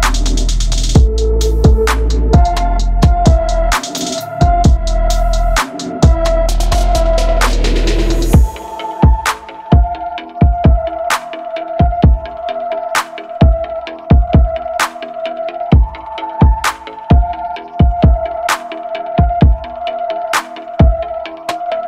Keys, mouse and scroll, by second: 0.0 middle click, 0.2-9.5 typing, 0.3 middle click, 0.6 middle click, 0.9 shift+click, 1.0 middle click, 1.5 middle click, 1.6-2.0 scroll up 3, 2.0 middle click, 2.2 middle click, 2.6 middle click, 2.7 middle click, 3.0 shift+middle click, 3.1 middle click, 3.3 shift+middle click, 3.4 scroll up 2, 3.7 middle click, 4.1 middle click, 4.2 middle click, 4.5 middle click, 4.7 middle click, 4.9 middle click, 5.0 middle click, 5.5 middle click, 5.6 middle click, 6.0 middle click, 6.1-6.5 middle drag, 6.5 Tab, 6.6 middle click, 6.8 middle click, 7.0 click, 7.1 middle click, 7.3 click, 7.4 middle click, 7.8 scroll down 4, 7.9 middle click, 8.2 middle click, 8.9 shift+middle click, 9.1 middle click, 9.2 click, 9.3 middle click, 9.4 middle click, 9.4 click, 9.5 middle click, 10.3 middle click, 10.6 KP_3, 11.2 middle click, 11.2 2, 11.3 alt+click, 11.3 middle click, 11.5-12.1 scroll up 1, 12.1 middle click, 12.2 KP_3, 12.4 click, 12.5 middle click, 13.1 scroll up 2, 13.2 middle click, 13.3-18.1 typing, 13.8 shift+middle click, 14.3 click, 14.4 shift+middle click, 14.6 click, 15.1 shift+middle click, 15.2 middle click, 15.5 middle click, 15.6 shift+click, 15.7 shift+middle click, 16.0 click, 16.4 shift+middle click, 16.6 middle click, 16.8 Tab, 16.8 middle click, 16.9 scroll up 3, 16.9 click, 17.0 middle click, 17.2 shift+click, 17.3 middle click, 17.4 middle click, 17.6 middle click, 17.8 middle click, 18.2 middle click, 18.4 shift+click, 18.8 middle click, 19.3 middle click, 19.4 KP_3, 19.8 middle click, 19.8-20.1 scroll up 1, 20.1 middle click, 20.3 click, 20.4 middle click, 20.4 a, 20.5-20.8 scroll down 1, 20.8 shift+middle click, 21.0 ctrl+e, 21.3 middle click, 21.5 shift+click, 21.5 middle click, 21.8 click.